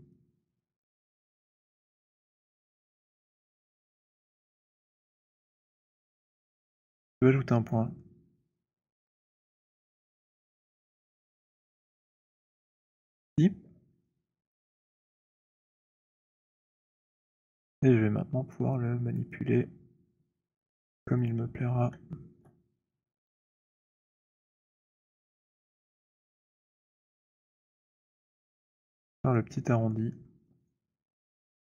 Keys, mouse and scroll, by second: 1.4 click, 4.6 click, 6.8 alt+click, 7.0 alt+click, 7.7 alt+click, 7.7 alt+right click, 8.9 alt+middle click, 9.5 alt+click, 11.7 right click, 13.0 right click, 15.4 shift+click, 17.4 right click, 19.2 right click, 21.3 shift+click, 29.0 alt+click, 29.6 alt+click, 31.1 alt+right click, 31.1 alt+middle click, 31.6 alt+click.